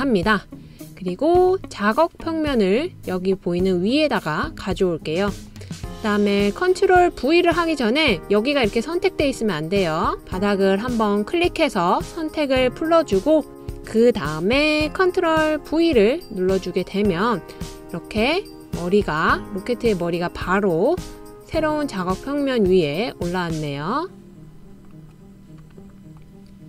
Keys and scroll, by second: 16.2 super+v.